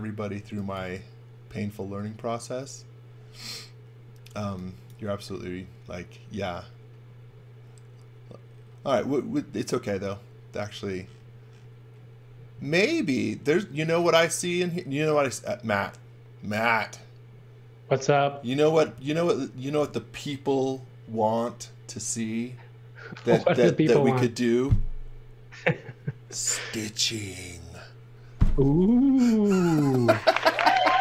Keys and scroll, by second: 0.4 x, 0.8 v, 4.4 x.